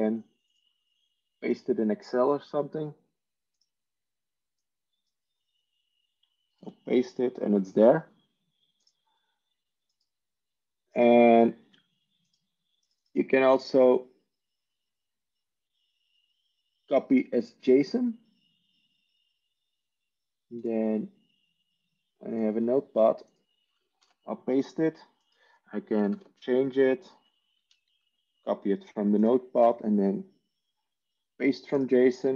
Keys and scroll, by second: 7.4 ctrl+v, 25.5 ctrl+v, 26.0-26.7 typing, 27.4 ctrl+a, 27.9 ctrl+c.